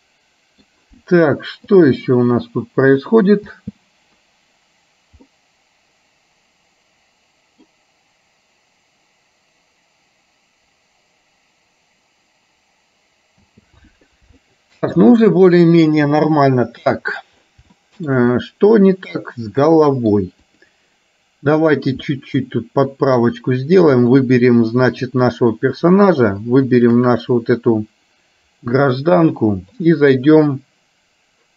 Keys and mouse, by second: 1.8 click, 3.2 click, 3.7 space, 5.5-7.9 middle drag, 13.7 space, 14.4 shift+middle click, 16.3-17.3 middle drag, 17.9 shift+middle click, 19.2-20.2 middle drag, 20.7 click, 21.7 click, 22.2-23.2 middle drag, 25.0 click, 26.9 shift+click, 30.0 click.